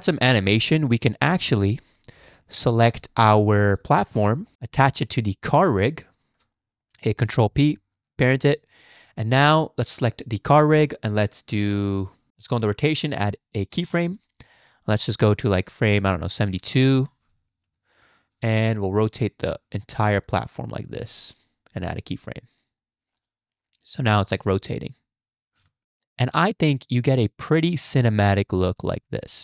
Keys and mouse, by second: 0.6-1.3 drag, 1.6 shift+drag, 2.3 shift+click, 3.4 shift+drag, 4.5 shift+click, 5.5 shift+click, 7.5 ctrl+p, 9.8 click, 11.6 click, 13.7 click, 14.9-16.8 drag, 17.6 Left, 19.0-21.0 drag, 21.9 click, 22.8-23.2 drag, 24.0 space, 25.6 space, 25.8-26.5 shift+drag.